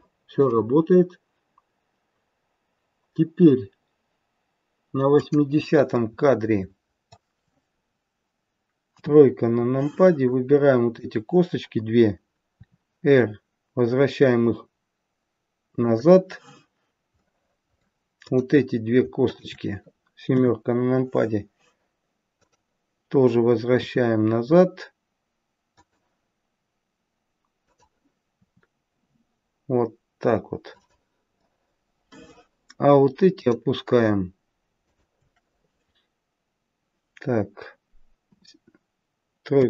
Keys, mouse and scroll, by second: 5.1 click, 5.9 middle click, 8.9 KP_3, 9.4-10.2 scroll up 2, 10.2 click, 13.2 r, 17.2 middle click, 18.2 click, 19.1 shift+click, 20.2 KP_7, 21.0-22.3 scroll down 2, 22.3 click, 23.6 r, 27.7 click, 28.4 r, 31.3 middle click, 33.2 click, 34.8 shift+click, 38.2 KP_7, 39.5 KP_3.